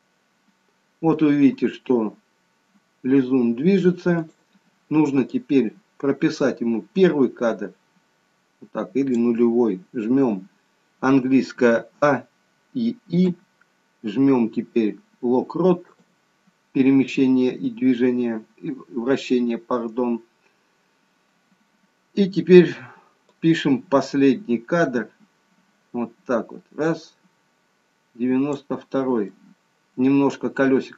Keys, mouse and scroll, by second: 4.2 click, 5.3 click, 12.0 a, 12.5-13.3 a, 13.3 i, 23.3 click, 29.3 middle click.